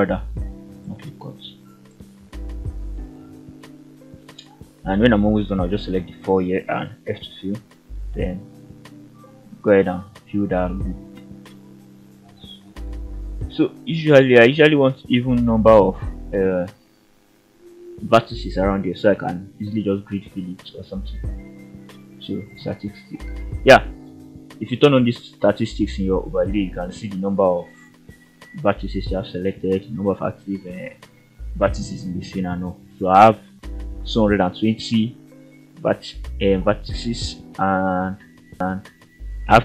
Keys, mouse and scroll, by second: 1.8 shift+click, 2.9 shift+click, 3.9 shift+click, 5.5 f, 6.1 click, 6.6 shift+click, 7.4-9.2 f, 11.3 click, 11.5 click, 20.0-21.5 drag, 22.2 shift+middle click, 23.3-25.2 drag, 37.3 shift+middle click, 38.6-39.2 scroll up 2, 39.2 middle click.